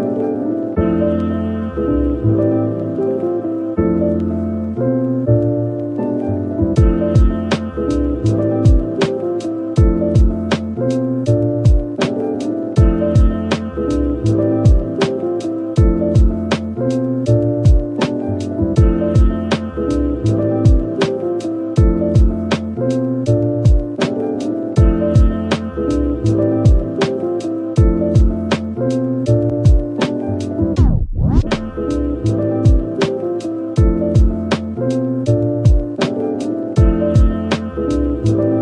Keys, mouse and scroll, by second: 10.5 scroll up 1, 15.4 double click.